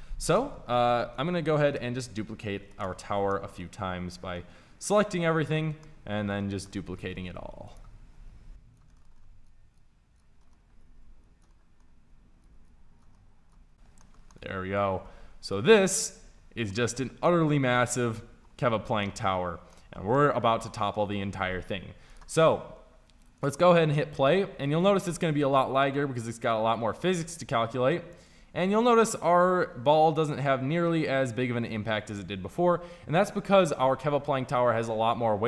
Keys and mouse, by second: 1.2 KP_1, 1.7 KP_5, 4.0 b, 7.1 shift+d, 8.2 g, 9.3-11.1 typing, 12.2 shift+d, 12.5 g, 12.7 g, 13.3 g, 15.5 KP_5, 15.9 z, 16.3 z, 18.5 a, 23.1-25.1 drag, 25.1 middle click, 26.8 middle click.